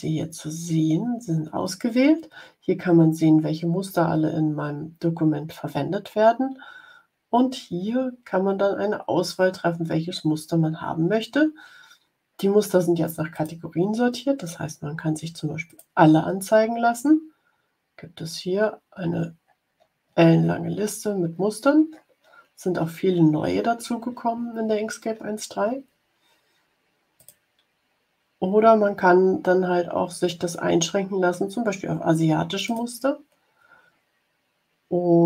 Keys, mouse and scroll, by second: 13.2 click, 15.6 click, 18.4-19.2 scroll down 1, 19.4-21.5 scroll down 12, 21.9 scroll down 1, 22.7-23.2 scroll up 2, 25.4-26.0 scroll up 1, 27.1 click, 32.6 click.